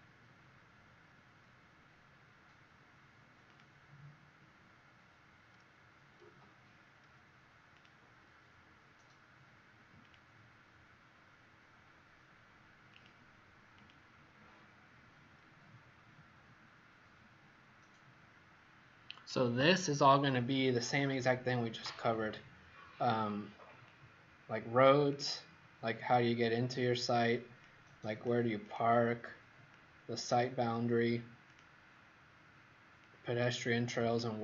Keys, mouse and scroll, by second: 15.6-16.4 scroll down 4, 22.0-23.8 scroll down 1, 23.8 click.